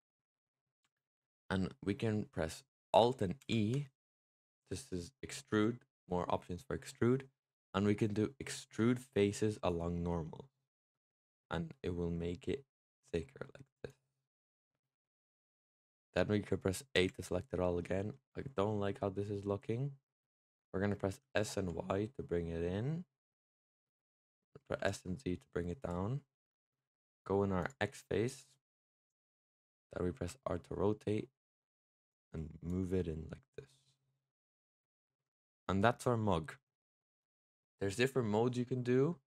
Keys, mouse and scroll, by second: 3.3 alt+e, 14.4-16.8 middle drag, 16.8 a, 17.7 middle click, 18.0-21.1 scroll down 3, 21.1 s, 24.5 s, 27.5 click, 30.0 r, 32.5 click, 34.8 click, 35.1 Tab, 35.2 click, 35.5-38.5 middle drag.